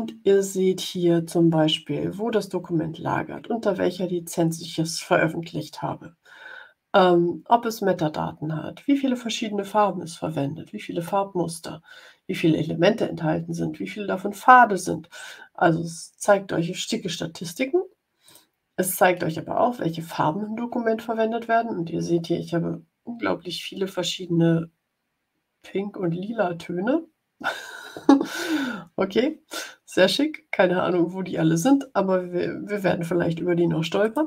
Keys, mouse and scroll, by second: 18.1 click, 33.9 click.